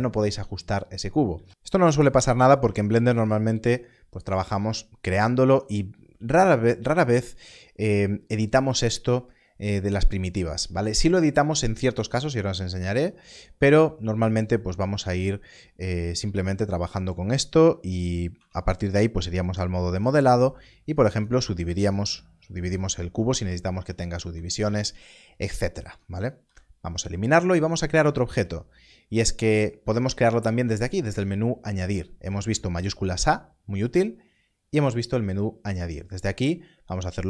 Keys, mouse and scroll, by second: 1.3 x, 2.9 shift+a, 4.3 click, 18.3 Tab, 19.9 right click, 20.9 click, 21.8 right click, 22.0 click, 24.0 click, 24.3 ctrl+z, 24.6 ctrl+z, 25.8 Tab, 26.4 x, 26.9 click, 29.7 click, 32.5 shift+a, 34.7 shift+a.